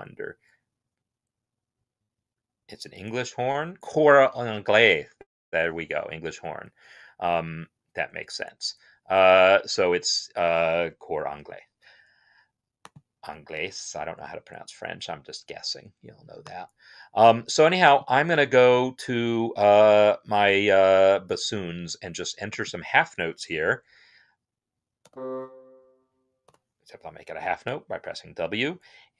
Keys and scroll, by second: 23.2 n, 26.1-26.8 typing.